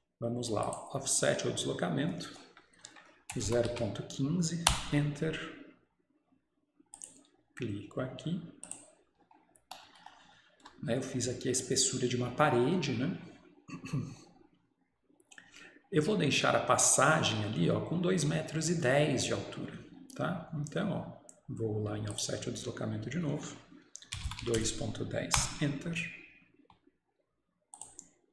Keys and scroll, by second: 9.8 typing, 10.7 Escape, 25.4 typing.